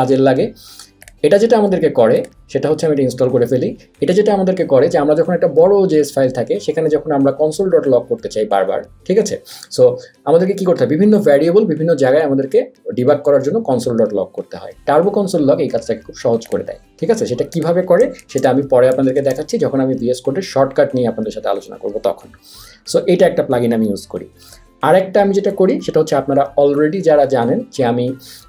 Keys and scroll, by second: 18.3 super+a, 18.3 BackSpace, 19.1 super+a, 19.3 BackSpace.